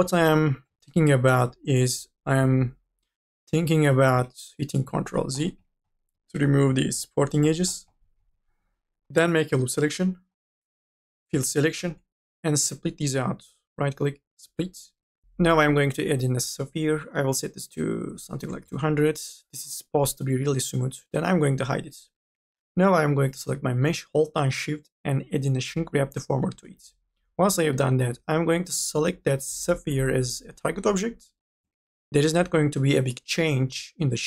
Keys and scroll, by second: 0.0 2, 0.4 e, 4.3 ctrl+z, 8.8-10.6 typing, 15.2 ctrl+z, 18.1 KP_2, 18.4 KP_0.